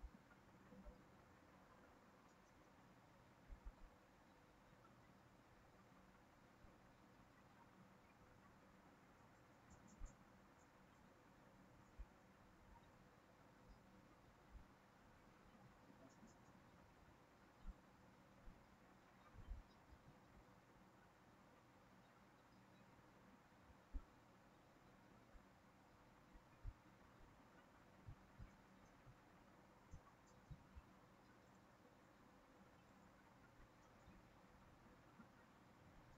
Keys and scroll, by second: 17.4 ctrl+c, 17.6 ctrl+v, 20.1 ctrl+z.